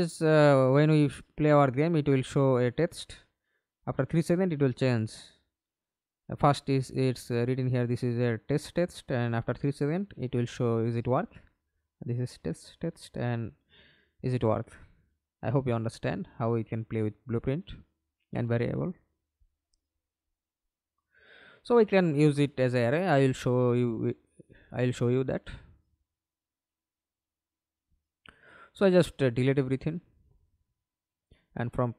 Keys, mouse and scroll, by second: 2.6 right click, 3.7 right click, 4.2-5.5 scroll down 1, 5.5 double click, 6.9 right click, 9.1 double click, 9.5 middle click, 10.2 F11, 10.8 alt+p, 16.3 Escape, 16.8 middle click, 17.8 F11, 22.7-23.2 scroll down 1, 23.2 scroll down 1, 23.3 right click, 25.6 Delete, 26.6 Delete, 27.7 Delete.